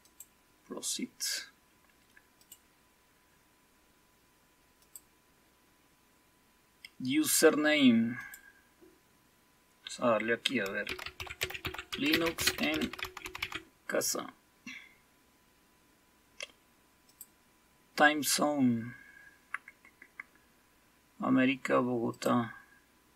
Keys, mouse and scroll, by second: 0.0 click, 2.4 click, 4.8 click, 8.2 click, 10.6-13.9 typing, 17.0 click, 19.8 scroll down 1, 22.1 click.